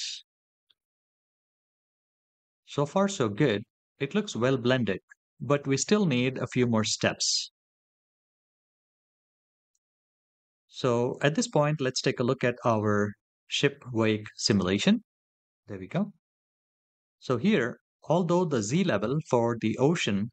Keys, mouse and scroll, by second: 0.5-2.8 middle drag, 9.6-12.6 drag, 17.7 middle click.